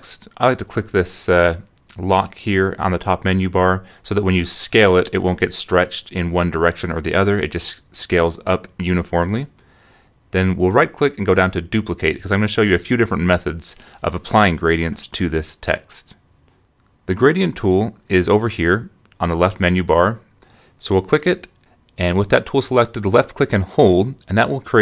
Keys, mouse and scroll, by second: 0.0-2.1 typing, 5.9-8.1 drag, 8.5 click, 9.9 right click, 14.0 click, 15.4 ctrl+click, 16.6 click, 18.3 click, 21.4 click.